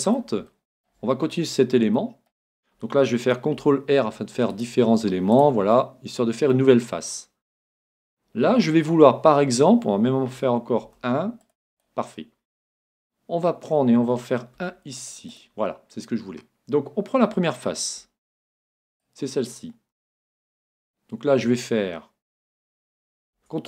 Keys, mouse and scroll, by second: 3.7 ctrl+r, 5.5-7.2 drag, 5.7-7.5 middle drag, 10.8 ctrl+r, 11.9-13.7 drag, 14.6 ctrl+r, 15.5-17.4 drag, 18.9 right click, 20.7 Escape, 23.4 ctrl+t.